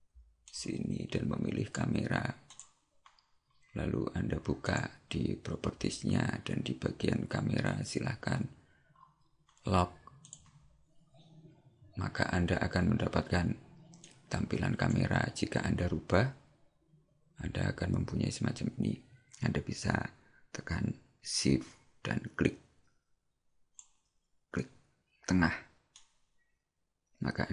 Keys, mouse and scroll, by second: 0.5 click, 7.7-9.6 scroll up 10, 10.4 click, 14.1 click, 16.0 scroll down 1, 17.4 scroll down 2, 18.2-18.6 scroll up 1, 22.5 shift+click, 26.0 shift+middle click.